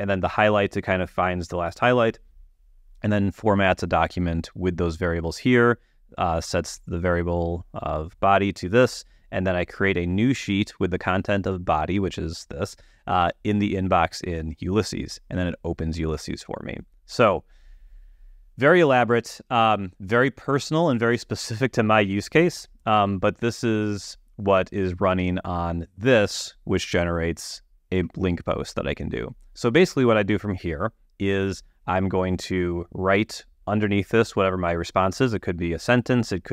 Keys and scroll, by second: 25.7 super+q.